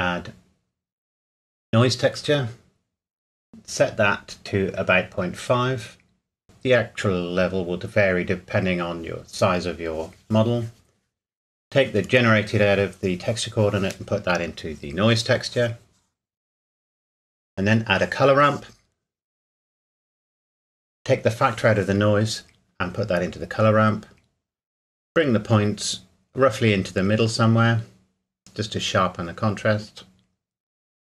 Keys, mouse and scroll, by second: 1.6 click, 3.7 KP_Decimal, 4.0 KP_5, 4.3 KP_Enter, 9.0 click, 15.1 click, 17.9 click, 19.8 middle click, 21.0 click, 24.6 click.